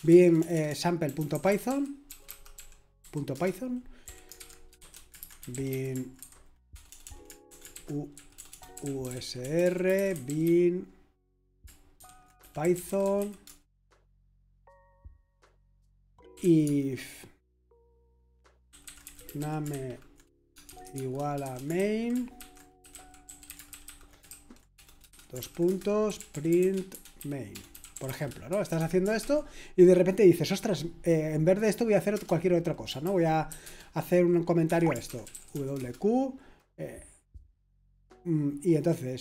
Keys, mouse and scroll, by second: 0.0-13.7 typing, 16.1-16.9 typing, 18.4-29.3 typing, 32.1 Return, 33.0 shift+;, 33.5 q, 33.6 Return, 34.6 Escape, 34.7-36.0 typing.